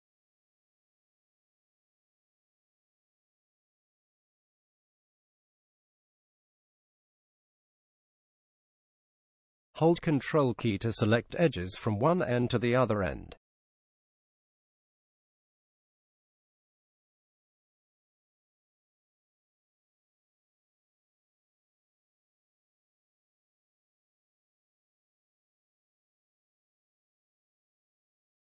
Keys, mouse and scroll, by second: 5.6-7.4 drag, 12.3-14.2 right drag, 15.0-17.0 right drag, 17.2 w.